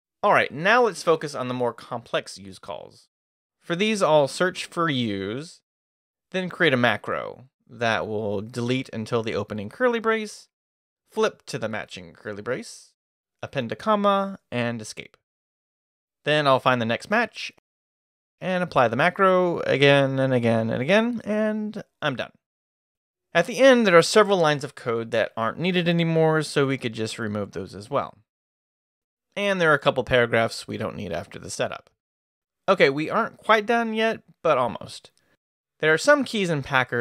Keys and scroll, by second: 1.5 [, 3.4-4.7 typing, 4.9 Return, 6.8 q, 7.1 a, 8.6-9.8 typing, 12.0-13.8 typing, 15.1 Escape, 16.3 q, 17.5-22.5 typing, 24.2-32.9 typing.